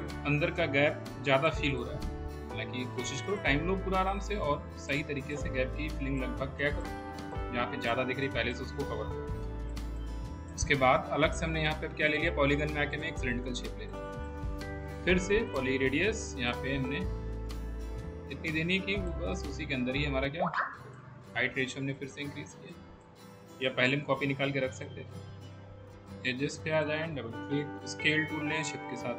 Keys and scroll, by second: 9.6 w, 23.5 w, 28.0 r.